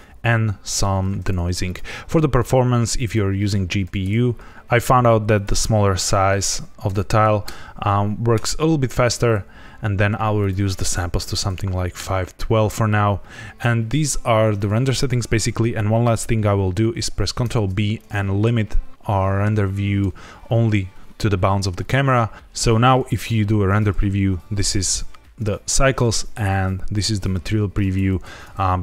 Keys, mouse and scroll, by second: 0.6 click, 1.6 click, 1.9-3.0 scroll down 2, 3.0 click, 5.3 click, 7.4 KP_Enter, 9.2 click, 10.3 click, 12.6-13.4 scroll up 3, 17.4 ctrl+b, 22.3 z, 22.5 z, 25.7 z, 27.3-27.7 scroll up 2, 27.9 ctrl+s, 28.2 z.